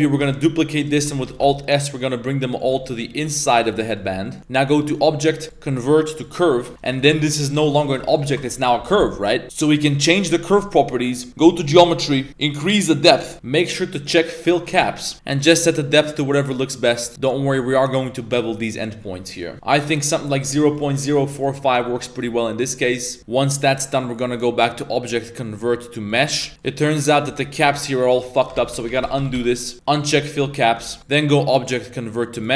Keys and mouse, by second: 0.2 shift+d, 1.0 shift+middle click, 1.2 z, 1.4 alt+s, 2.8 z, 2.9-3.3 middle drag, 3.5 shift+middle drag, 3.8 middle click, 4.3 middle click, 4.9-6.3 drag, 6.7 z, 6.8 right click, 7.1 g, 8.0 middle click, 11.6 click, 12.6 click, 14.4 click, 14.8 shift+middle click, 15.1-17.6 drag, 19.0-19.5 middle drag, 19.5 a, 20.5 click, 23.2 a, 24.3-26.2 drag, 26.5 shift+Tab, 26.5 middle click, 27.2 3, 27.7 right click, 28.3 right click, 28.5 ctrl+z, 28.9 ctrl+z, 29.0 ctrl+z, 29.3 ctrl+z, 29.7 Tab, 30.0 click, 30.7 Tab, 31.0 Tab, 31.0-32.4 drag.